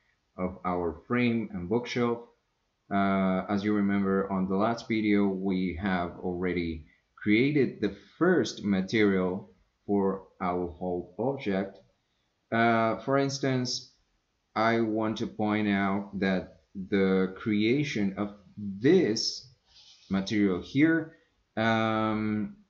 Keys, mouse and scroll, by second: 15.9-17.4 drag.